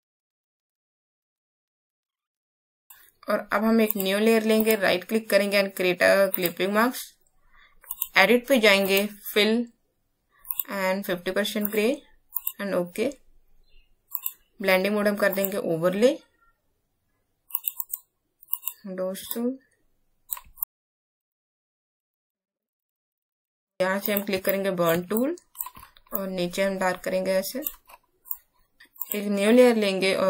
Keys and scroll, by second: 2.5 Down, 2.6 Down, 2.9 space.